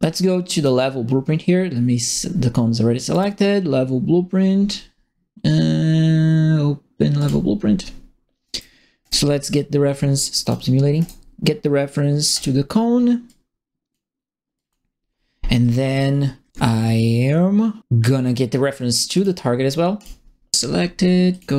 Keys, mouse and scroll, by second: 0.5 click, 2.0 click, 3.1 click, 7.1 click, 8.4 right click, 9.0 right click, 10.4 click, 10.9 right click, 12.3 click, 12.9 middle click, 13.2 click, 14.5 click, 19.1 click, 19.9 click, 20.4 right click, 21.3 click.